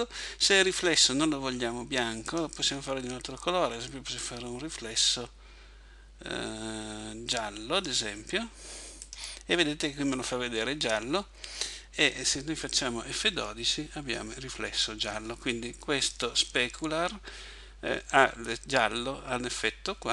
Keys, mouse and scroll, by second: 2.3 click.